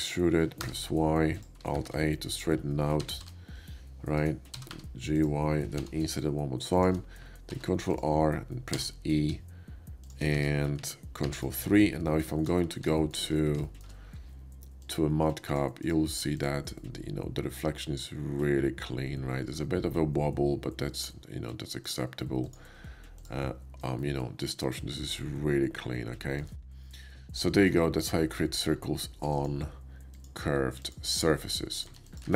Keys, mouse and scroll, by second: 0.7 y, 1.3 click, 1.7 alt+a, 3.0 g, 4.8 y, 5.1 click, 5.6 i, 6.8 click, 7.5 ctrl+r, 7.9 click, 8.7 w, 8.8 e, 10.0 shift+click, 10.3 Tab, 10.8 ctrl+Tab, 11.2 ctrl+3, 11.5-12.2 middle drag, 13.0 shift+middle drag, 13.2 shift+middle click, 13.4-14.8 shift+middle drag, 14.8 shift+click, 14.9-15.4 shift+middle drag, 15.4 shift+click, 15.5 shift+middle drag, 15.8 shift+click, 15.9-16.2 shift+middle drag, 16.2 shift+click, 16.8-20.9 middle drag, 21.6 click, 22.4 click, 23.0-24.0 drag, 24.1 shift+right click, 24.2 shift+middle click, 24.5 shift+middle click, 24.7 shift+middle click, 24.9 shift+middle click, 25.1 shift+middle drag, 25.5 shift+middle drag, 25.8 shift+right click, 26.6 shift+click, 27.4 shift+middle click, 27.7 shift+middle click, 29.3 click, 30.0 click, 30.8 click, 31.7 click, 32.1 shift+click, 32.2 shift+a.